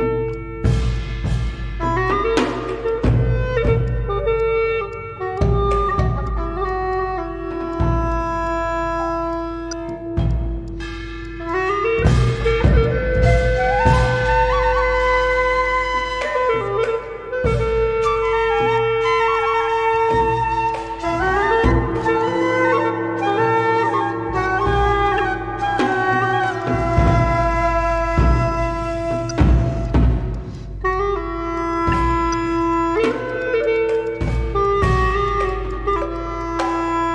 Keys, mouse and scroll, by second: 0.3 Tab, 0.6 Tab, 0.9 Tab, 1.3 alt+click, 1.4 alt+click, 2.0 Tab, 2.4 Tab, 2.8 alt+click, 4.3 Tab, 4.9 Tab, 6.2 Tab, 6.8 Tab, 7.2 alt+middle click, 8.0 Tab, 8.4 alt+click, 8.8 scroll down 1, 9.9 shift+click, 10.7 shift+click, 11.2 shift+click, 12.1 shift+click, 12.5 shift+click, 12.8 shift+click, 15.0 shift+click, 18.6 shift+click, 20.1 shift+click, 20.5 shift+click, 21.2 shift+click, 21.5 scroll down 1, 21.7 scroll up 1, 22.0 shift+click, 23.1 scroll down 1, 23.3 alt+click, 23.9 scroll down 1, 24.0 scroll up 1, 24.2 scroll down 1, 24.4 alt+click, 24.7-25.1 scroll up 1, 25.6 shift+click, 25.9 shift+click, 26.3 shift+click, 26.6 shift+click, 26.9 shift+click, 29.5 scroll up 1, 29.8 alt+click, 30.3 shift+click, 30.8 alt+middle click, 30.9 alt+click, 32.1 shift+click, 32.7 shift+click, 33.1 shift+click, 33.4 shift+click, 33.7 shift+click, 34.0 shift+click.